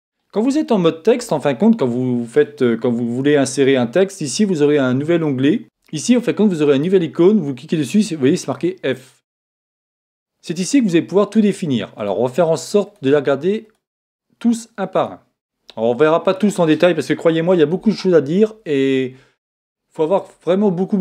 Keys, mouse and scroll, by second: 5.6 click, 11.1-12.0 scroll up 1, 12.0-18.2 drag, 12.0 middle click.